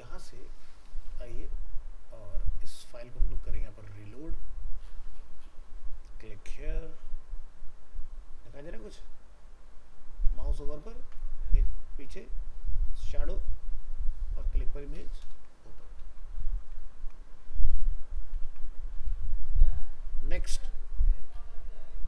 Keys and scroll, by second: 15.2 ctrl+0, 16.0 ctrl+w.